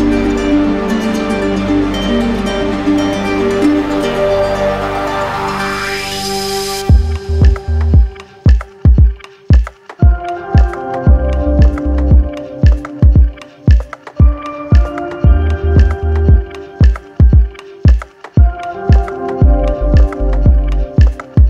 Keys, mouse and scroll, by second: 1.0 click, 1.7 click, 3.0 right click, 3.2 shift+click, 3.9 shift+click, 4.9 click, 5.2 click, 5.5 click, 6.4 right click, 7.2 right click, 8.1-9.3 right drag, 9.4 right click, 11.4 right click, 12.3 right click, 13.3 right click, 13.5 shift+right click, 14.0 right click, 14.6 shift+right click, 14.9 shift+right click, 16.7 alt+right click, 17.4 right click, 18.2 click, 18.8 click, 19.7 click, 20.3 shift+click, 20.8 click.